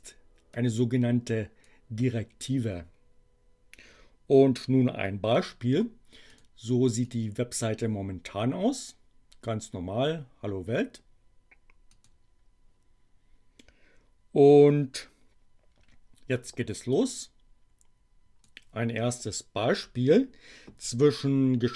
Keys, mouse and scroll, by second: 0.5-1.8 drag, 5.3 click, 6.3 click, 6.9 click, 11.9 click, 16.9-18.7 drag.